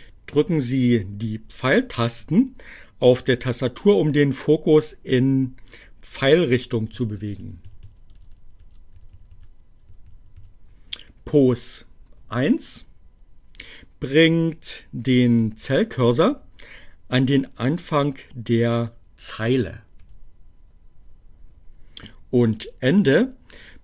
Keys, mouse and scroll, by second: 5.3 Right, 8.1 Left, 8.9 Up, 9.6 Down, 18.1 Home.